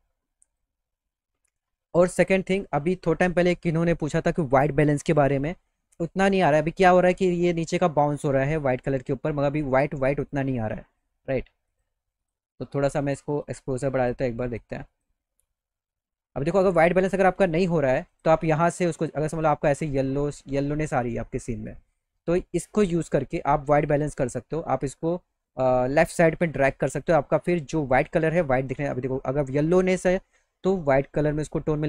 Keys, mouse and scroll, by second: 0.4 click, 9.8 click, 11.7 click, 12.2 click, 13.5 click, 14.0 click, 14.5 click, 14.9 click, 16.8 click, 18.1 click, 19.5-21.0 drag, 23.8 click, 24.4-27.1 drag, 29.5 click.